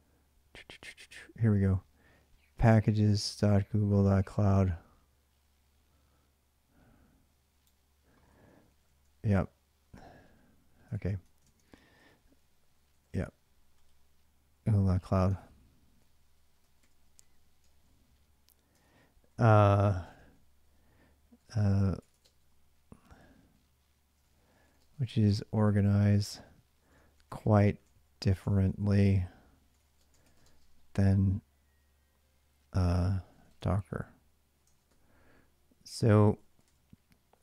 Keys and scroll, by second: 8.5 ctrl+a, 8.6 ctrl+a, 10.8 ctrl+a, 11.2 ctrl+a, 11.7 2, 12.7 `, 14.7-19.9 typing, 15.1 ctrl+[, 21.1 ,, 21.2 space, 22.0 space, 23.7-30.2 typing, 33.1-37.4 typing.